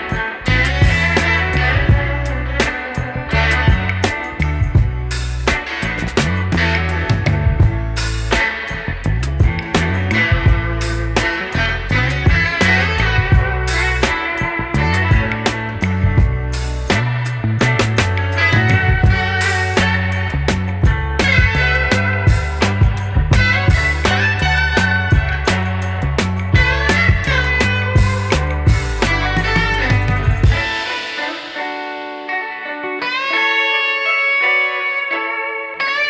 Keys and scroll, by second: 3.9 KP_0.